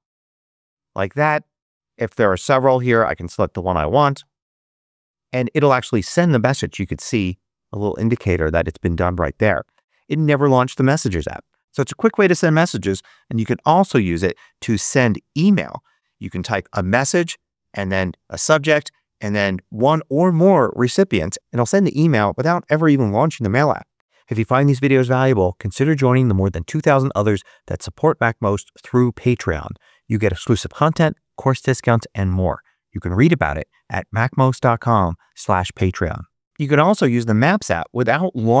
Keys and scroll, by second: 0.0-0.5 typing, 4.0 Return, 11.6 super+BackSpace, 12.5-13.9 typing, 14.6 Return, 23.9 ⟳, 36.4 BackSpace.